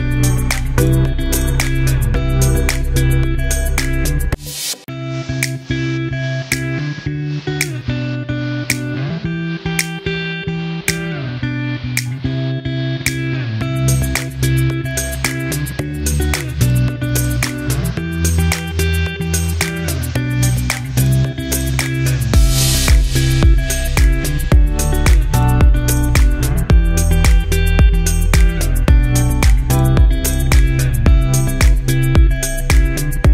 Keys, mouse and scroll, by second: 3.6 scroll up 1, 4.8-6.6 scroll down 1, 9.2 click, 10.0 scroll up 1, 12.5 click, 16.0 click, 18.6 click, 21.1 click, 26.6 click, 28.1 scroll down 1, 30.7 g, 32.4-33.3 drag.